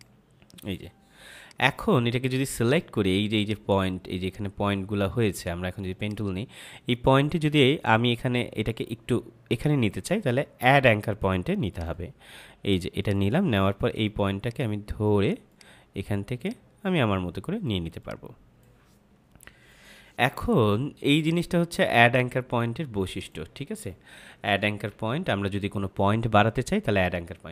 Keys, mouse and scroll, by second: 11.6 click, 21.2 click.